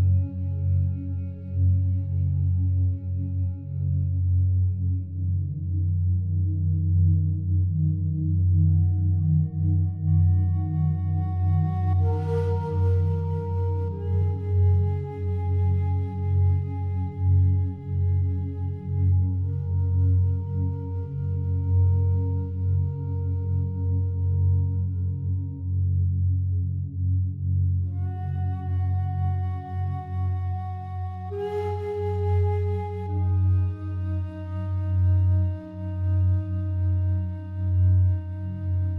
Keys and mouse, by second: 1.7 click, 2.6 typing, 3.1 click, 3.3 click, 4.0-4.8 typing, 5.9-8.0 typing, 7.2 click, 8.0 click, 8.3 click, 9.2-9.7 typing, 9.9 Return, 10.9 click, 11.8 click, 12.6-14.4 typing, 14.4 Return, 15.5-17.1 drag, 17.3-18.5 typing, 18.8 Return, 19.7-20.4 typing, 19.9-20.9 drag, 21.1 click, 21.9-22.9 typing, 24.1 click, 26.0 click, 28.9 click, 30.4 g, 30.8 x, 34.6 click, 35.6 alt+shift+click.